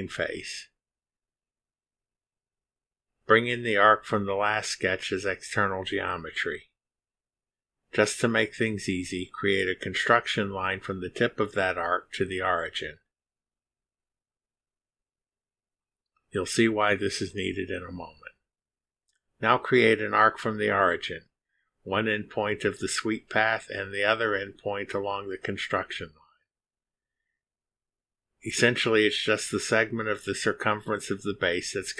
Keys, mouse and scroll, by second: 1.3 click, 2.7-3.7 drag, 5.7 click, 7.7 click, 11.5 click, 14.3 click, 17.2 click, 21.0 click, 23.8 click, 25.5 click, 28.1 click, 29.7 click, 31.5 click.